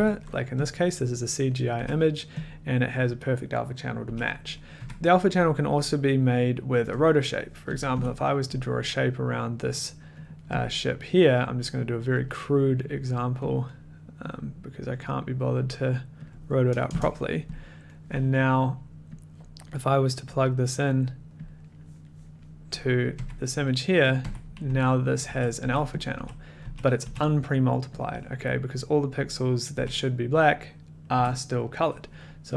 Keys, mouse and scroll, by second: 0.7 click, 0.7 middle click, 1.7 a, 2.5 click, 2.5 middle click, 4.0 a, 4.8 click, 4.8 1, 5.8 scroll, 7.7 click, 7.9 o, 9.6 click, 10.2 click, 10.6 click, 10.6 middle click, 11.1 middle click, 11.8 click, 12.2 click, 12.9 click, 13.4 click, 13.8 middle click, 14.3 click, 14.9 click, 15.6 click, 16.3 click, 16.9 Return, 18.0 middle click, 19.7 click, 20.9 click, 21.4 click, 23.1 click, 23.1-27.0 typing, 24.1 click, 26.0 click, 26.1 scroll, 27.0-28.0 scroll, 28.0 click, 29.7-31.3 typing.